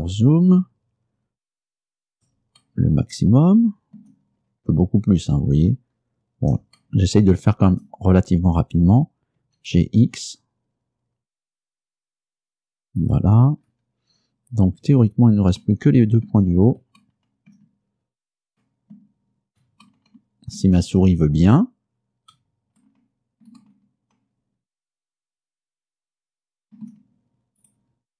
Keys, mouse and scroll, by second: 1.7-2.2 shift+scroll up 3, 2.7-4.2 shift+middle drag, 4.5-5.3 shift+scroll up 1, 5.5-5.9 scroll down 1, 6.0-6.4 scroll up 1, 6.9 shift+middle click, 7.5 shift+scroll up 1, 7.9 shift+scroll down 1, 8.0 shift+scroll up 2, 8.2 shift+middle click, 9.5 g, 10.1 x, 13.1 click, 13.7-14.1 scroll down 2, 14.2-14.6 scroll down 2, 23.8 shift+middle click, 24.1-26.9 shift+middle drag, 26.9-27.5 shift+scroll up 1, 27.7 right click.